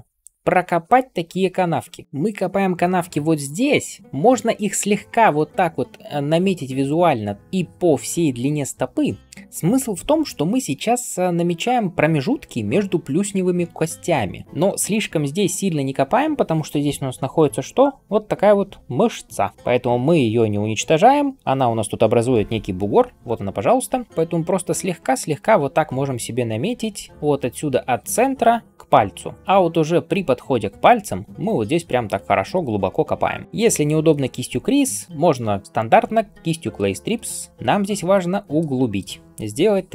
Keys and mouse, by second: 8.1-33.4 shift+drag, 8.1-33.4 shift+middle drag, 8.1-33.4 shift+right drag.